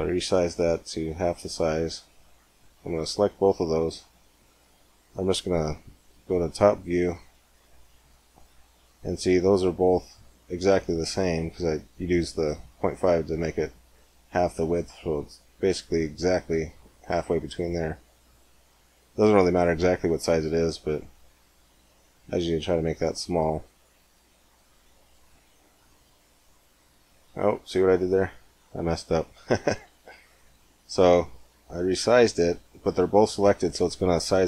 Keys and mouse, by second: 0.6-2.5 middle drag, 2.5 right click, 3.3-6.1 middle drag, 6.1 KP_7, 7.4 z, 9.3 click, 11.2 KP_7, 12.5-13.5 middle drag, 18.0 s, 23.3-25.4 middle drag, 24.7 z, 25.4 click, 28.2 middle click, 29.7 ctrl+z, 32.8 click, 33.2-34.4 middle drag.